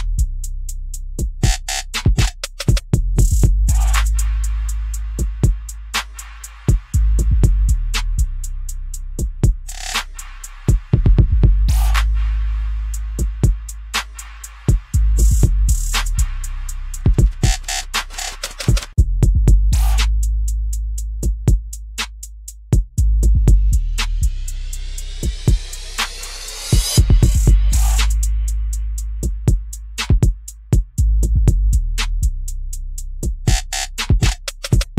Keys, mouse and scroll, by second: 2.5 click, 2.8 middle click, 3.0 click, 3.2-5.9 middle drag, 10.0-14.0 drag, 14.0 middle click, 14.9 click, 14.9 KP_Decimal, 15.3-17.8 middle drag, 16.6 KP_Decimal.